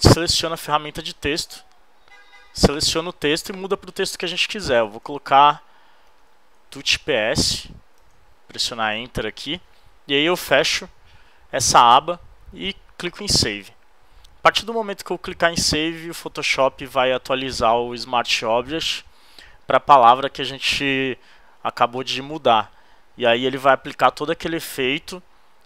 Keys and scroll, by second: 4.6-7.3 typing, 8.0 super+Return.